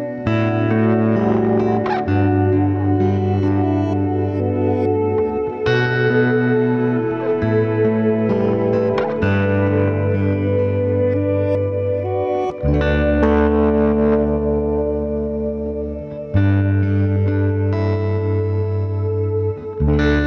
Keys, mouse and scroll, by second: 0.4-1.0 scroll up 1, 1.0-4.5 drag, 6.8 click, 7.5-10.1 drag, 10.1 scroll down 1, 10.6 shift+middle click, 11.2 Tab, 11.9 g, 13.0 `, 14.2 g, 15.6 g, 16.8-19.3 middle drag, 19.3 g.